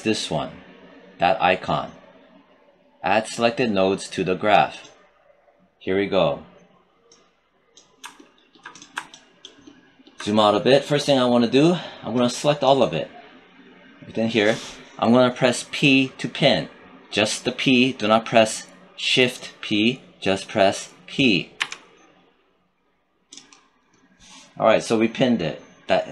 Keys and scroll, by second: 21.5 p.